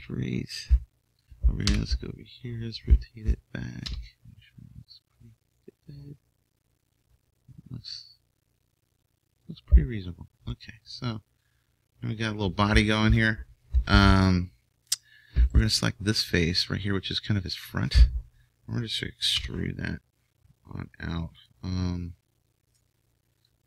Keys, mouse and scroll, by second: 1.7 KP_3, 3.8 r, 7.8-9.7 drag, 10.5-13.0 middle drag, 19.3 e, 22.3-23.6 drag.